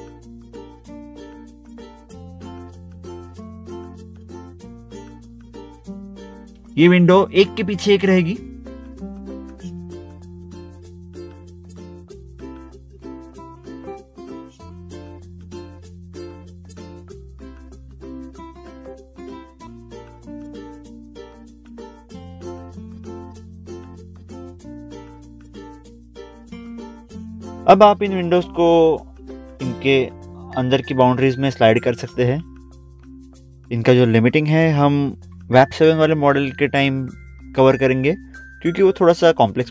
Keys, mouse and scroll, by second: 0.3 middle click, 1.1 scroll up 1, 1.3 scroll down 1, 1.8 middle click, 1.9 middle click, 2.2 scroll down 1, 3.2 click, 4.1 right click, 4.5 scroll down 1, 4.5 scroll up 1, 5.0 scroll down 1, 5.6 scroll down 1, 7.3 scroll down 1, 7.4 click, 7.6 scroll up 1, 8.2 scroll up 1, 9.3 scroll down 1, 9.9 middle click, 9.9 scroll down 1, 10.9 middle click, 11.1 scroll up 1, 11.3 scroll down 1, 11.8 middle click, 12.2 middle click, 12.5 scroll down 1, 13.7 click, 15.0 scroll up 1, 15.5 scroll down 1, 17.1 click, 17.3 scroll up 1, 18.4 middle click, 18.9 middle click, 19.1 scroll down 1, 22.0 scroll up 1, 24.0 scroll up 1, 24.1 click, 25.0 middle click, 26.3 middle click, 27.1 middle click, 27.2 scroll down 1, 27.4 scroll up 1, 28.2 scroll up 1, 28.3 scroll down 1, 29.3 click, 32.2 click, 32.7 click, 33.1 scroll down 1, 33.3-33.7 scroll up 2, 33.4 middle click, 33.5 middle click, 35.0 click, 37.7 ctrl+click, 38.0 ctrl+click, 38.0 scroll down 1, 38.3 middle click, 39.0 scroll down 1, 39.3 click.